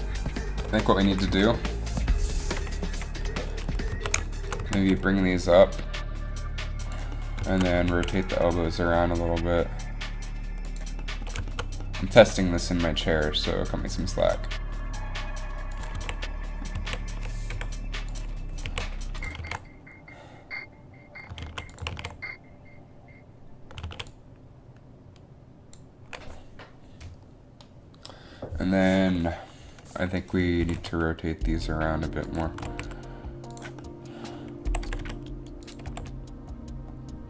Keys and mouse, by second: 1.2 Up, 1.4 Up, 2.8 KP_3, 4.0 z, 4.7 z, 4.9 g, 8.0 a, 8.3 right click, 8.7 r, 13.2 r, 14.5 r, 16.1 a, 16.9 a, 17.6 i, 18.8 a, 19.5 alt+a, 21.7 alt+a, 22.1 alt+a, 22.5 alt+a, 24.1 alt+a, 30.7 r, 32.6 r, 34.8 r, 35.2 r, 36.0 r, 36.1 r.